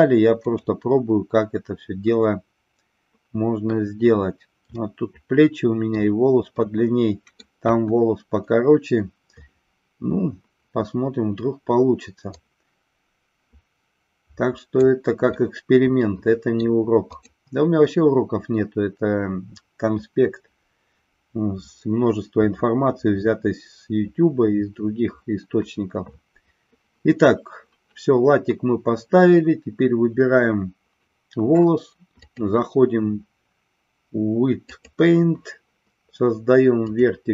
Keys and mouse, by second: 4.7-6.0 middle drag, 6.6 middle click, 7.6 KP_1, 12.3-14.8 drag, 15.2-16.6 middle drag, 17.1 click, 32.1-35.0 drag, 36.8 click.